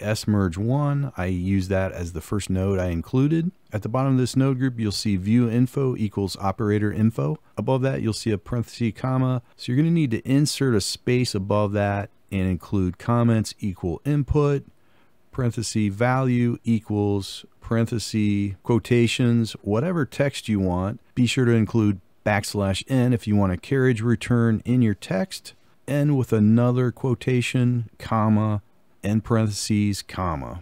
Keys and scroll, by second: 9.4 ctrl+v, 18.4-21.2 typing, 26.0-30.6 typing.